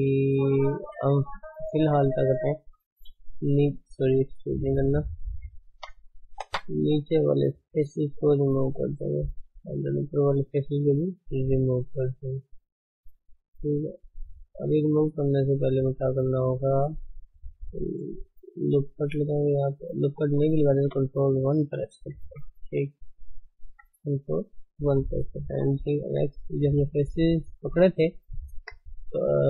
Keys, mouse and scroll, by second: 1.0 Tab, 1.5 middle click, 1.9 Tab, 3.1 e, 4.3 ctrl+z, 4.7 ctrl+z, 5.7 Tab, 6.4 3, 7.0 click, 8.4 x, 8.7-9.9 middle drag, 9.9 click, 11.3 x, 11.6-18.7 middle drag, 12.9 Tab, 13.8 ctrl+1, 14.6 ctrl+z, 15.0 ctrl+z, 15.2 ctrl+z, 18.7 ctrl+r, 20.2 Tab, 20.7 ctrl+1, 21.4-22.2 middle drag, 22.2 KP_1, 23.2 right click, 23.5 scroll up 3, 23.8 Tab, 24.2 shift+middle click, 24.5-25.5 scroll up 1, 25.5 g, 29.2-29.4 middle drag.